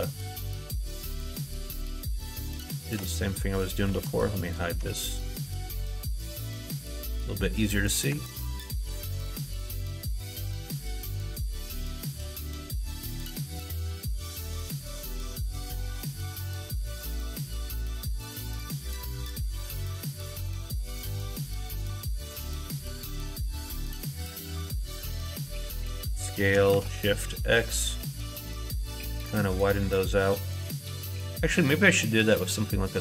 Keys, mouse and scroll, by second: 2.8 alt+z, 3.9 alt+z, 4.3 click, 4.7 Tab, 5.0 click, 6.0 h, 8.1 Tab, 8.7 alt+z, 9.7 3, 10.1-11.3 drag, 12.5-14.2 shift+drag, 16.8 ctrl+right click, 21.8 ctrl+right click, 23.4 ctrl+z, 25.9 s.